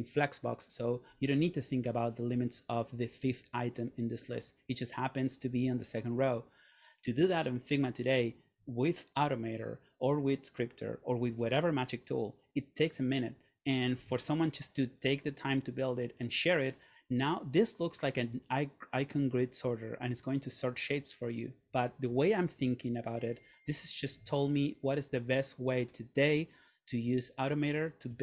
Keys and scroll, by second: 14.3 super+Tab.